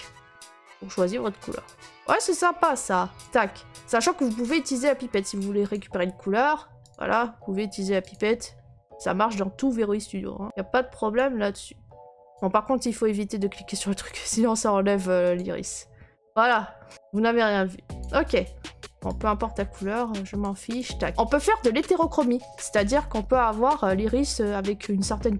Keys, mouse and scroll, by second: 3.2 click, 3.2 click, 4.5 click, 5.7 click, 6.9 click, 8.1 click, 11.2 click, 12.3 click, 13.4 middle click, 13.4 middle click, 14.1 click, 15.4 click, 16.9 click, 18.0 click, 20.4 click, 20.8 click.